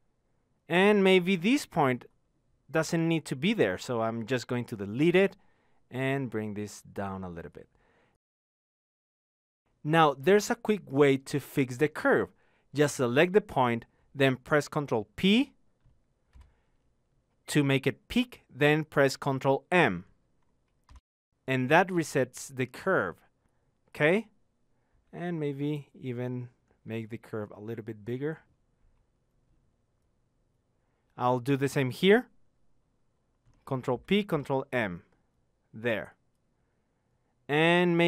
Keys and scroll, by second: 21.0 ctrl+p, 25.6 ctrl+m.